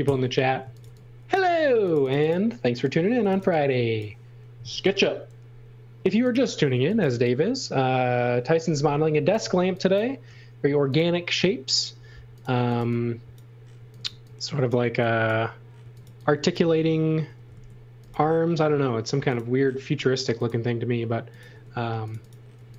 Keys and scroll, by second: 0.0 super+c, 0.3-1.4 typing, 2.9-3.9 typing, 4.6 super+v, 6.4-7.4 typing, 9.4 space, 10.6 m, 12.2-17.2 typing, 21.5 space, 22.5 x.